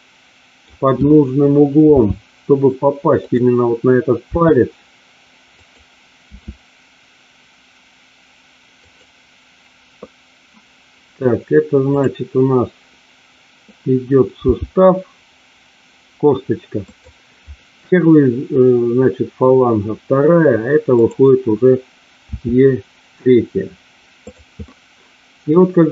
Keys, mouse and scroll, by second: 1.9 g, 3.1 click, 4.6 e, 5.5 click, 6.3 e, 8.8 click, 14.4 g, 16.9 click, 22.3 e, 24.3 click, 24.6-25.9 middle drag.